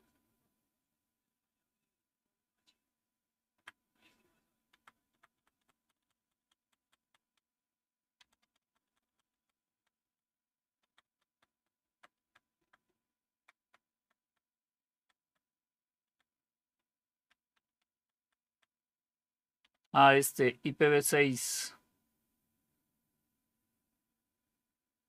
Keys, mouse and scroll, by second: 0.3-3.4 Up, 4.6 Down, 5.0 Down, 5.3 Down, 5.5 Down, 5.7 Down, 6.1 Down, 6.3 Down, 6.5 Down, 6.7 Down, 6.9 Down, 7.1 Down, 8.1 Down, 8.3 Down, 8.5 Down, 8.7 Down, 9.0 Down, 9.2 Down, 9.6 Down, 10.8 Down, 11.0 Down, 11.2 Down, 11.4 Down, 11.7 Down, 12.1 Down, 12.5 Down, 13.2 Down, 13.5 Down, 14.1 Down, 14.9 Down, 15.1 Down, 15.9 Down, 16.5 Down, 17.1 Down, 17.3 Down, 17.6 Down, 17.8 Down, 18.1 Down, 18.4 Down, 19.5 Up.